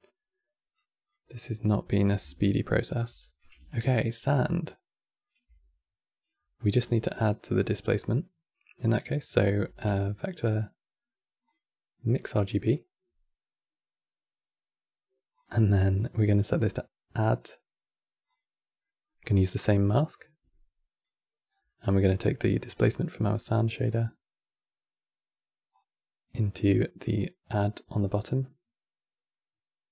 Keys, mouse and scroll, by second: 0.4 click, 1.1-6.5 middle drag, 6.5 scroll down 5, 6.8 middle click, 7.7-9.1 drag, 9.1 middle click, 9.4 q, 15.6-18.5 drag, 18.5-19.6 middle drag, 19.6 click, 21.2-23.6 scroll down 2, 23.6-25.4 middle drag, 25.4 click.